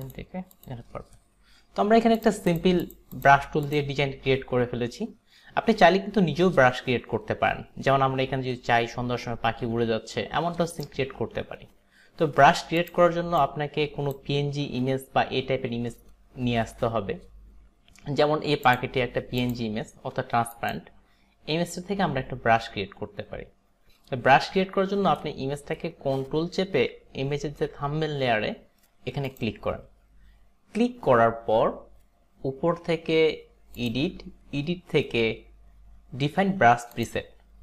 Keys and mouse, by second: 0.6 click, 2.2 click, 2.6 click, 2.8 click, 3.2 click, 3.8 click, 12.8 click, 13.4 click, 18.7 click, 19.5 click, 20.6 click, 29.3 ctrl+click, 33.9 click, 37.0 click.